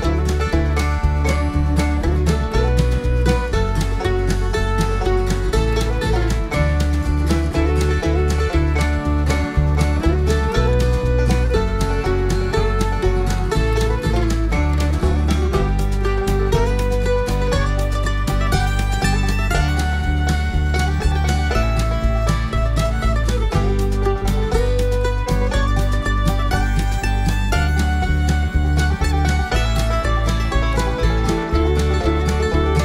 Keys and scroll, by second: 7.8 ctrl+z.